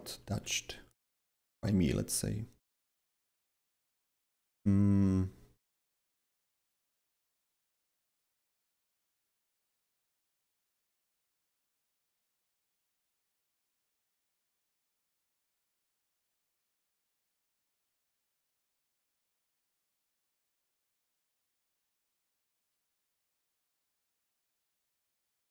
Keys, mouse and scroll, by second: 0.0-8.4 typing, 10.3-11.0 typing, 13.1-14.5 typing, 13.3 click, 16.0 a, 20.5 click, 20.8-22.0 typing, 21.4 click, 23.3-25.5 drag, 24.3 w.